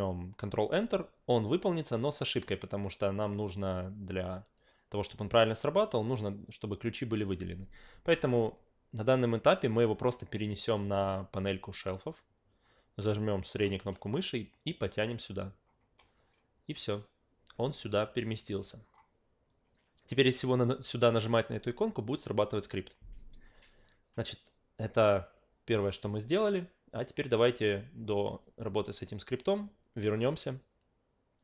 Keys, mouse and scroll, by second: 8.1 ctrl+a, 13.6-15.6 middle drag, 18.8 click.